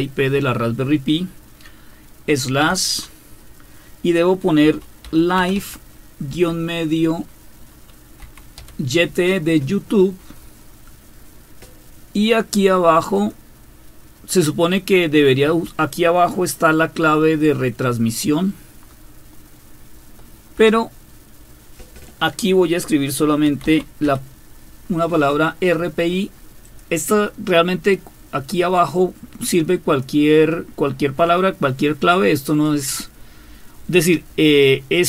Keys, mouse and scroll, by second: 2.3 typing, 4.6-6.3 typing, 8.2-8.6 typing, 13.1 click, 15.4 Home, 17.3 Delete, 18.0 Delete, 18.3-20.7 Delete, 23.2-24.5 typing, 26.6 click.